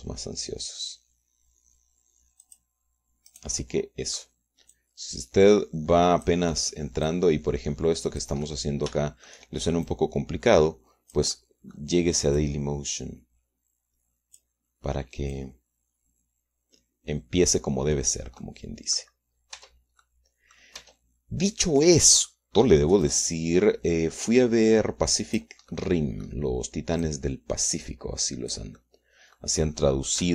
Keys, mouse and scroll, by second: 0.3 s, 3.5 click, 4.3 click, 5.3 click, 5.8-7.5 drag, 8.1-9.5 drag, 9.9 shift+click, 10.9-13.0 drag, 13.5-15.7 drag, 16.4-19.4 drag, 19.5 middle click, 20.6 Tab, 20.6 middle click, 21.1 click, 21.9 Tab, 22.7 middle click, 24.1-26.7 drag, 26.8 middle click, 28.1-29.8 drag.